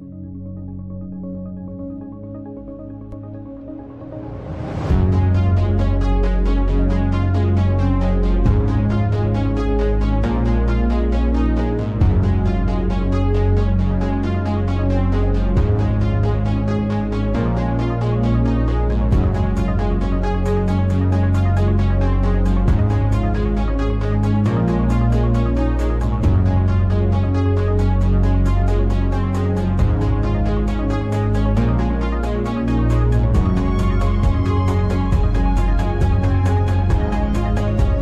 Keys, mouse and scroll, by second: 1.5 click, 3.7 click, 5.0-9.6 drag, 10.3 click, 12.6-15.7 drag, 15.7 n, 19.2-24.6 drag, 24.6 0, 28.2 click, 33.8-38.0 drag.